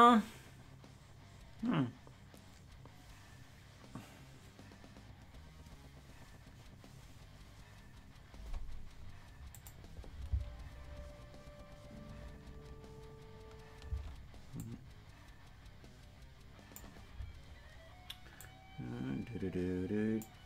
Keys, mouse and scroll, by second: 9.5 click, 13.9 space, 14.6-16.8 drag, 18.4-20.3 drag.